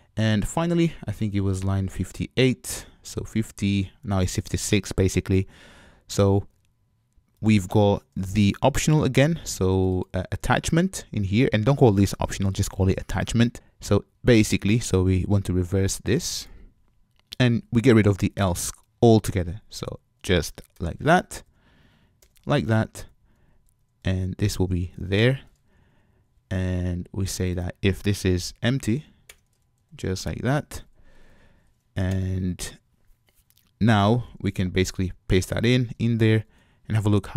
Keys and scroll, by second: 17.3 super+x, 22.4 super+y, 24.4 alt+shift+Up, 29.3 Return, 35.1 super+v.